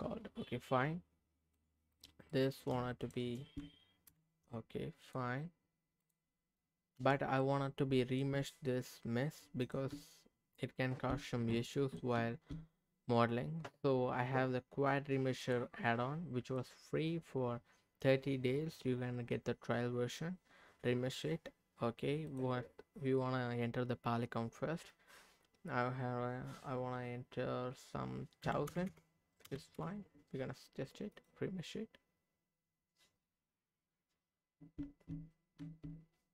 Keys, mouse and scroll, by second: 1.9 click, 2.3 middle click, 3.0 shift+click, 4.1 ctrl+KP_Add, 5.0 click, 6.0 click, 6.9 h, 7.4 middle click, 8.3 Tab, 9.6 click, 9.9 Tab, 11.5 middle click, 12.1 Tab, 15.4 click, 16.4 click, 22.2-29.7 drag, 28.9 KP_0, 31.1-34.2 drag, 34.8 Tab, 35.6 Tab.